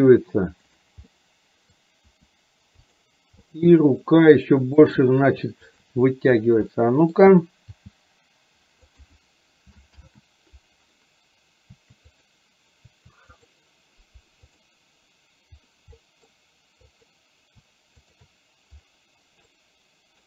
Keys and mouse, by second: 1.2 middle click, 2.1 r, 3.6 middle click, 4.8 click, 6.9 middle click, 7.7 g, 10.1 ctrl+z, 12.1 click, 13.5 click, 16.1 middle click, 17.0 click, 18.1 shift+click, 19.6 middle click.